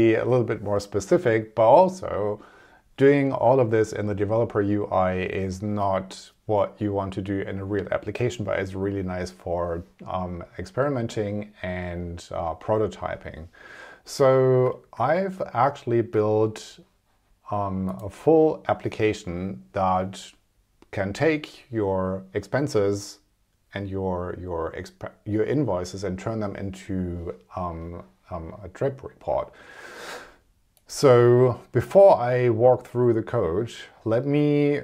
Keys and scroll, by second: 14.7 super+Tab.